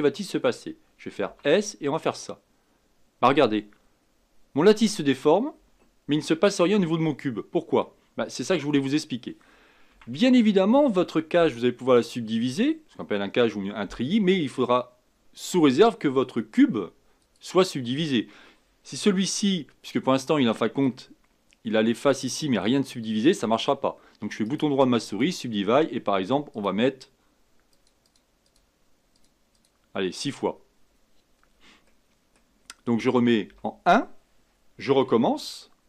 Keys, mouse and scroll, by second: 1.2 s, 7.8-9.9 middle drag, 9.9 Tab, 17.2 click, 19.1 Tab, 19.8-23.9 middle drag, 24.4 right drag, 26.5-31.8 drag, 31.8-33.4 middle drag, 35.1 Tab.